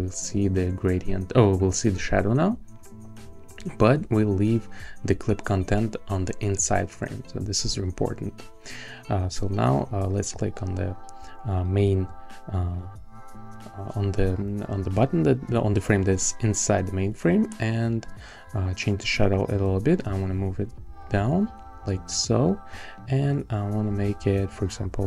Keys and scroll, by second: 20.0 Down, 20.7 Up, 21.2 Up, 23.8 Down, 24.7 Down.